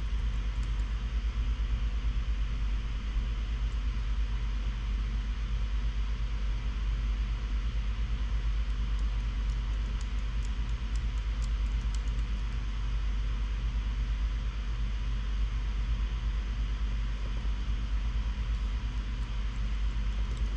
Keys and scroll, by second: 0.0-0.3 typing, 0.8 Page_Up, 0.9 Tab, 5.7 Escape, 16.9-18.5 typing, 19.0 alt+BackSpace, 19.8 Escape, 20.0 Escape, 20.2 Escape, 20.2-20.5 typing.